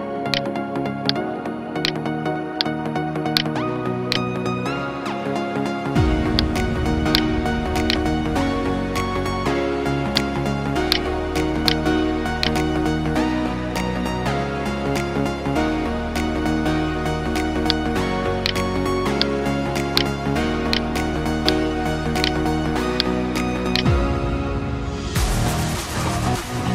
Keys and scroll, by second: 3.1 alt+BackSpace, 4.4 ctrl+d, 9.6 ctrl+space, 10.1 ctrl+space, 10.8 ctrl+space, 12.6 ctrl+z, 14.5 ctrl+alt+z, 23.6 alt+BackSpace, 25.3 ctrl+d.